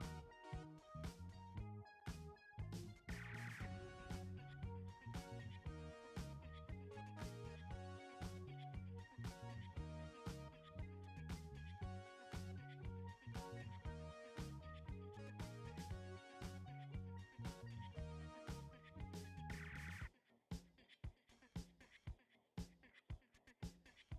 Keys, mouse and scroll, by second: 3.3-12.6 drag, 12.6 ctrl+z, 16.7 click.